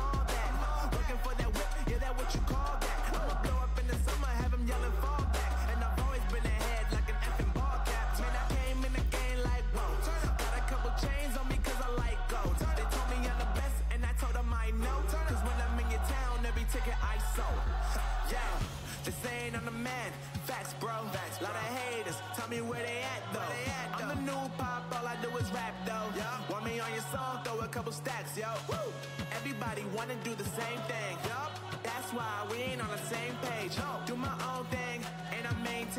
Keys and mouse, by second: 8.4-15.2 middle drag, 11.3 z, 11.9 z, 15.9-18.0 typing, 17.0 Tab, 21.9 ctrl+r, 23.4 z, 24.2 Tab, 24.6 Tab, 27.2 Tab, 27.5 z, 28.0 Tab, 29.0 ctrl+r, 30.7 a, 30.8 a, 32.7 ctrl+r, 33.4 Tab, 33.9 z.